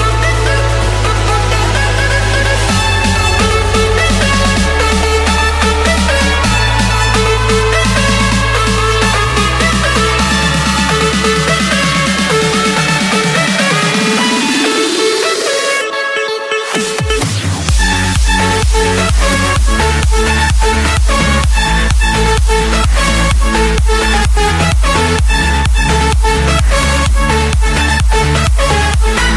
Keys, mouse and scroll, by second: 1.4 click, 1.8-2.2 scroll, 2.5 Escape, 3.3-4.8 typing, 5.1 Return, 5.9 click, 6.5 click, 7.3 click, 7.7 Return, 11.5-12.6 drag, 13.9 click, 14.3 scroll, 15.5 middle click, 16.2 middle click, 16.8 middle click, 17.7 click, 18.3 click, 18.9 scroll, 19.5-20.2 scroll, 20.2-21.0 scroll, 21.0 Escape, 24.5-25.6 drag, 25.9-27.0 drag, 27.1-28.3 drag, 28.4-29.3 drag.